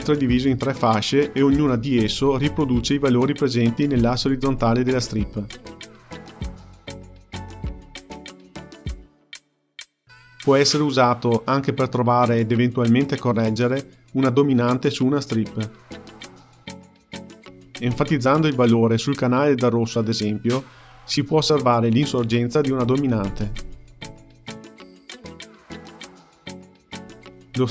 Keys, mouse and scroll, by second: 0.0-3.1 scroll up 1, 15.5-18.5 drag, 19.5 click, 20.0-21.8 scroll down 2, 21.8-24.9 drag, 25.9-27.7 drag.